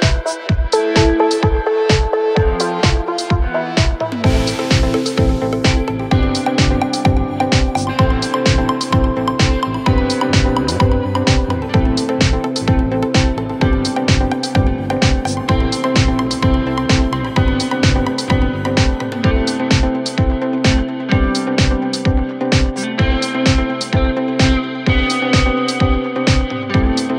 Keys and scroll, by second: 5.9 5, 6.6 Return, 15.8 shift+Page_Down, 16.1 ctrl+Page_Up, 17.4 ctrl+Page_Up, 20.0 ctrl+z, 25.7 ctrl+z.